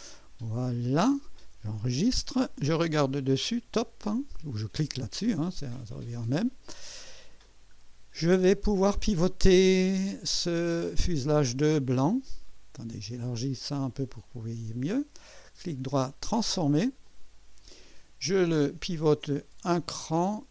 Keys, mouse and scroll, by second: 0.1-1.6 drag, 2.1 ctrl+s, 3.3 KP_2, 4.7 click, 5.7-6.4 right drag, 6.5 scroll up 1, 10.5 click, 13.6 click, 15.3 right click, 17.0 click, 19.1-20.5 drag.